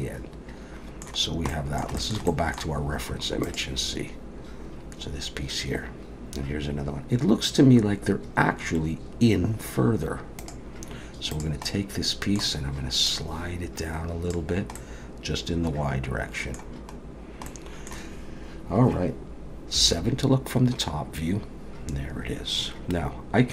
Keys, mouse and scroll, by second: 1.2 scroll down 1, 1.5 middle click, 2.0 shift+middle click, 2.3 middle click, 11.3 click, 11.7 middle click, 13.1 click, 14.8 middle click, 17.2 scroll down 1, 17.5 middle click, 19.8 KP_7, 20.9-22.7 scroll down 1.